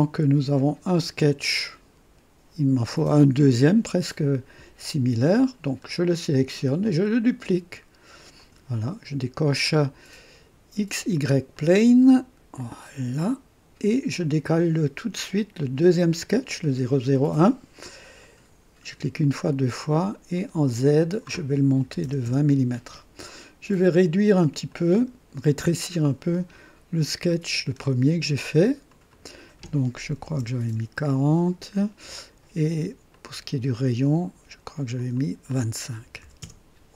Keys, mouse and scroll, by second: 5.3 click, 6.8 click, 8.3 click, 11.5 click, 12.5 click, 14.1 click, 18.2 click, 19.2 click, 20.7 click, 21.8 KP_2, 22.0 KP_0, 22.2 KP_Enter, 23.1 typing, 24.6 click, 26.8 scroll down 1, 27.3 right click, 28.8 click, 30.1 KP_4, 30.3 KP_0, 30.7 Return, 33.1-34.0 drag, 34.9 click, 36.0-36.6 typing, 36.4 Return.